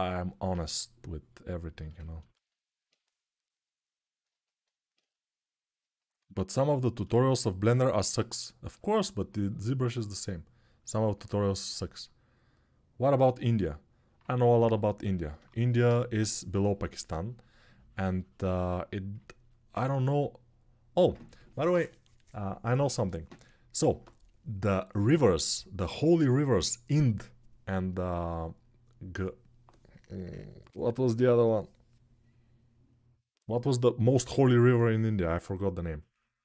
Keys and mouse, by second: 4.0-6.3 alt+shift+right drag, 6.3-36.4 ctrl+alt+drag.